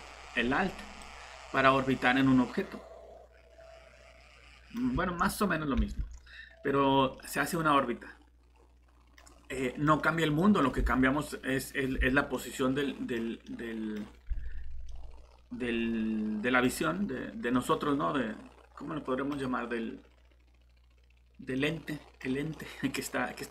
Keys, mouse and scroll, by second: 0.9 typing, 1.0 click, 2.2 typing, 3.5 typing, 5.8 alt+Tab, 7.2 middle click, 9.2 scroll down 1, 9.6 middle click, 17.9 scroll up 1, 21.6 middle click.